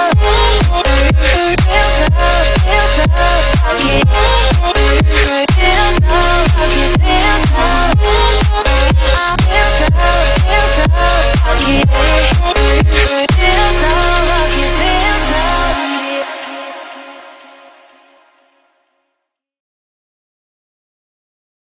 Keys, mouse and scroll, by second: 0.8-1.2 scroll down 1, 1.9 m, 2.9 Right, 4.6 4, 4.6 Return, 4.9 space, 5.7 ctrl+z, 6.6 m, 6.8 click, 6.8 click, 7.7 Right, 8.5-9.2 typing, 8.9 Return, 9.8 shift+middle click, 10.3 click, 10.6-11.0 scroll up 1, 12.1 l, 12.9-14.2 scroll up 1, 14.2 space, 14.8 t, 15.2 click, 16.3 space, 16.7 shift+middle click, 17.7 r, 19.0 click, 19.0 click, 21.1 space.